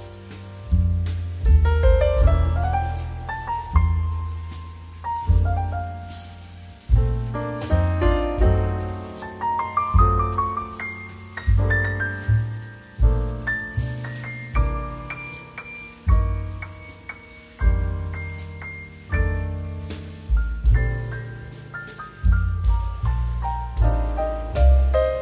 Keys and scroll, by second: 4.7 space, 8.5 space, 11.5 space, 14.4 space, 20.0 space, 22.9 space.